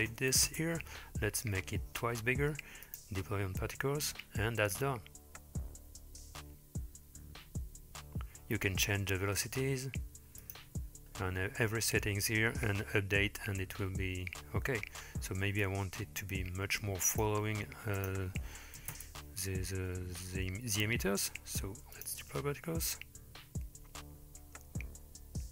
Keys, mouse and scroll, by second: 2.9 click, 9.1-10.5 scroll up 5, 10.5 click, 11.0-12.0 scroll down 2, 15.7-17.3 drag, 18.0-19.0 drag, 22.0 drag.